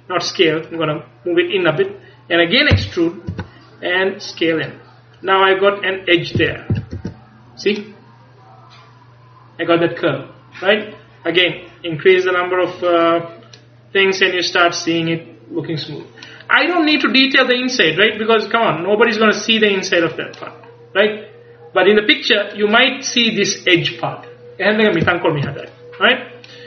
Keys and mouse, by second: 2.8 e, 4.3-6.0 drag, 6.7 z, 6.8 z, 7.0 Tab, 12.7-14.8 middle drag, 25.7-26.6 middle drag.